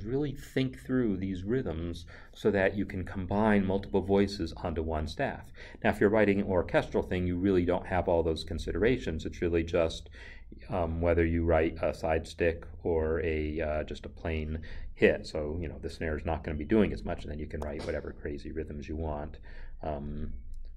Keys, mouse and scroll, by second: 7.2 n, 17.1 5, 17.6 b.